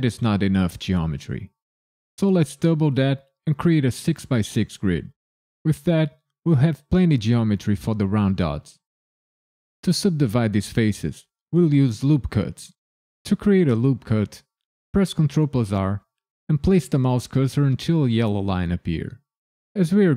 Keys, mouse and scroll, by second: 14.9 ctrl+r.